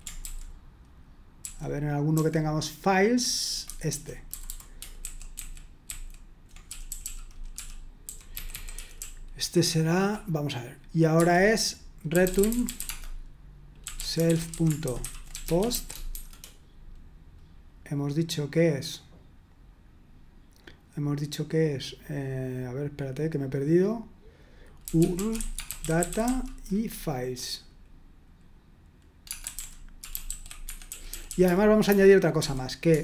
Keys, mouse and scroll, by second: 1.4 ctrl+u, 5.6-6.9 typing, 12.3 ctrl+d, 13.9-16.6 typing, 24.6-26.7 typing, 29.2-33.0 typing.